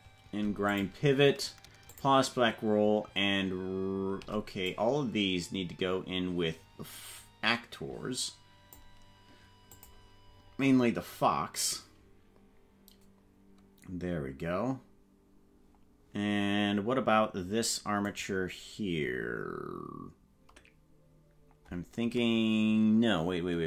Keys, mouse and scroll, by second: 0.7 shift+click, 2.0 shift+click, 4.6-7.2 drag, 6.5-7.0 scroll up 4, 9.7 click, 10.3 scroll down 4, 18.1 right click.